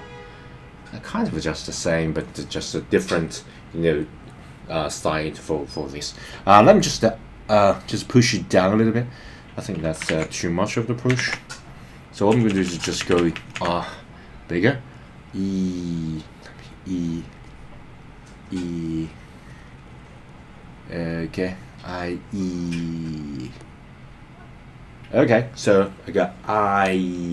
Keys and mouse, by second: 7.5 click, 8.5 click, 10.1 super+z, 11.3 super+z, 12.5-13.7 typing, 14.6 click, 15.7 click, 16.2 click, 16.5 click, 16.9 click, 17.2 click, 17.4 click, 18.3 click, 18.6 click, 18.9 click, 19.1 click, 19.5 click, 19.7 click, 19.9 click, 20.0 click, 20.3 click, 20.5 click, 20.7 click, 20.9 click, 21.1 click, 21.3 click, 21.8 click, 22.0 click, 22.4 click, 23.0 click, 23.4 click, 24.0 click, 24.3 click.